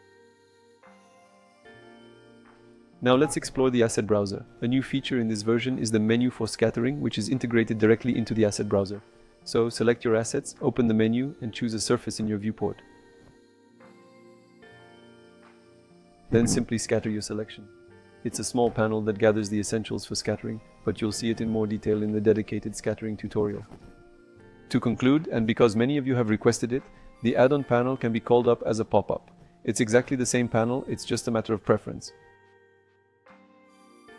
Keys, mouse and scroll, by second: 0.8 Tab, 1.5-4.2 middle drag, 4.9 click, 5.5 click, 6.6 n, 9.5 click, 10.1 ctrl+click, 11.6 click, 12.8 click, 15.9 click, 19.8 click, 21.9 click, 23.8 click, 24.2 ctrl+click, 24.7 click, 28.3 click, 29.1 click, 29.8 n, 30.9 click.